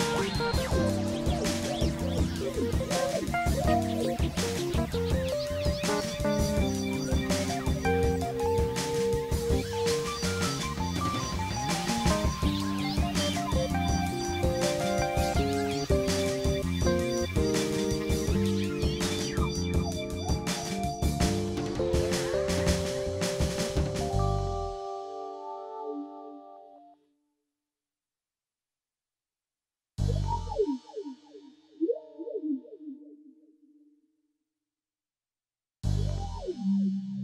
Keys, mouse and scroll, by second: 0.9 click, 2.8 click, 3.7 click, 4.6 click, 5.5 click, 6.4 click, 7.0 click, 8.9 click, 10.0 click, 11.6 KP_1, 12.9 x, 13.1-16.2 drag, 15.8 x, 17.0 click, 17.8 click, 18.8 click, 20.8-21.7 drag, 22.4 click, 23.5 click, 24.2 click, 25.1 click, 26.0-27.0 drag, 27.6-28.6 drag, 30.8 click, 31.6 click, 32.2 click, 32.8 click, 33.7 KP_3, 35.1 x, 35.2-37.2 drag.